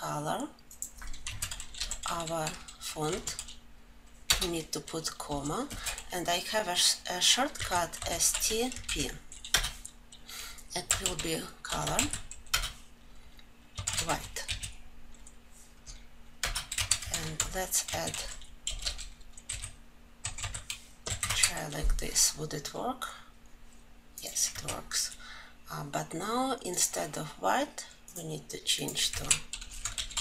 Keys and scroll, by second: 9.4 ctrl+j, 9.9 Return, 12.9 Return.